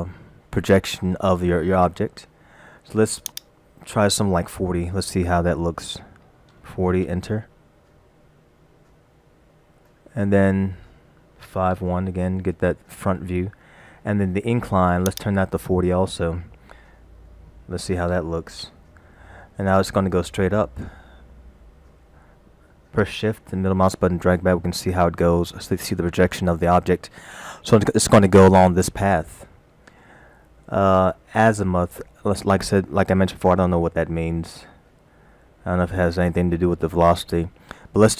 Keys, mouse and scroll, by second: 3.3 click, 9.1-9.9 scroll down 3, 9.9 middle click, 11.5 KP_5, 11.8 KP_1, 12.5-12.9 scroll up 4, 15.1 click, 19.9 scroll down 3, 20.6-21.2 scroll down 2, 21.2-23.0 scroll down 4, 23.5 shift+middle click, 25.9 shift+middle click.